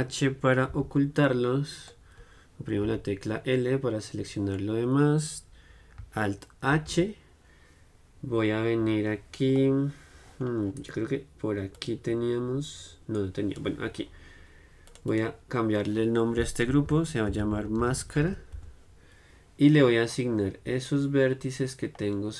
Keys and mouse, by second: 1.0 h, 1.7-3.1 middle drag, 3.1 l, 3.7 middle click, 12.0-13.9 drag, 15.1-17.2 drag, 21.0-22.3 drag.